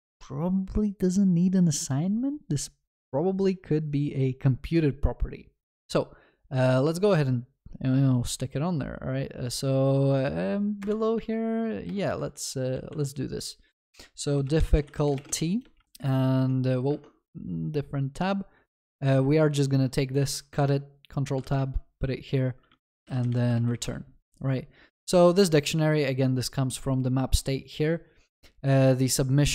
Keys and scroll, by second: 17.0 ctrl+Tab, 20.1 ctrl+x, 20.6 ctrl+Tab, 23.5 ctrl+v.